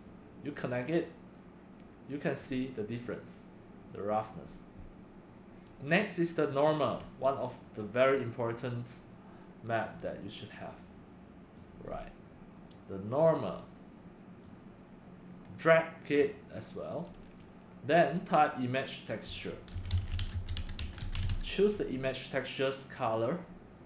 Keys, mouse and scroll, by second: 0.2-6.9 drag, 6.9 middle click, 6.9 scroll, 7.0-8.7 drag, 8.7-9.6 right drag, 9.6 scroll down 3, 9.8-10.9 drag, 10.9 right click, 11.6 middle click, 11.9 middle click, 11.9 middle click, 13.2 middle click, 13.6 drag, 14.4-14.8 drag, 16.3-18.7 drag, 18.8 click, 19.2 click, 19.9-21.3 typing, 23.0 click.